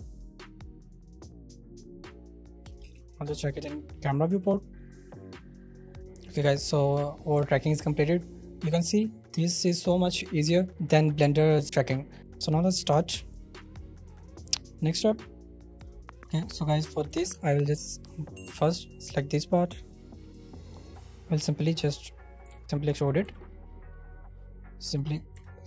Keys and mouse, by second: 2.3 shift+right click, 2.8 shift+space, 6.5 shift+middle click, 12.3 middle click, 13.2 middle click, 15.1 middle click, 16.9 middle click, 17.3 Tab, 18.2 shift+middle click, 21.4 i, 22.3 ctrl+middle click, 22.5 ctrl+z, 22.9 middle click, 23.2 x, 25.3 p.